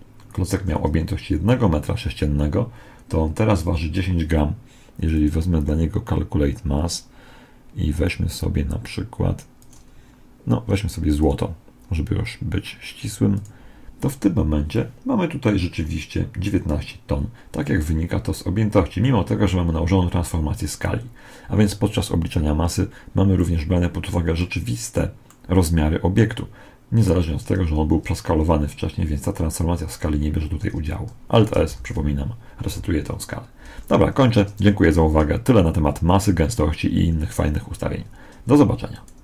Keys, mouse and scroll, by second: 1.1-3.2 middle drag, 5.0 click, 9.5-12.9 drag, 23.3-27.1 middle drag, 31.7 alt+s.